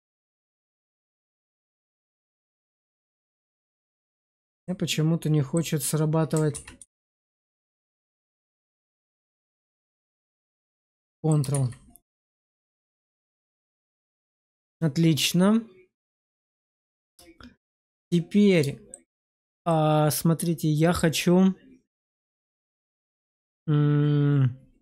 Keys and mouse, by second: 0.6 click, 2.8 ctrl+z, 3.5 middle click, 4.5 middle click, 6.4 ctrl+z, 6.7 ctrl+z, 8.5 click, 10.8 middle click, 11.4 shift+z, 12.0 middle click, 12.5 Tab, 13.2-18.8 middle drag, 19.6-20.8 middle drag, 23.3-24.8 middle drag.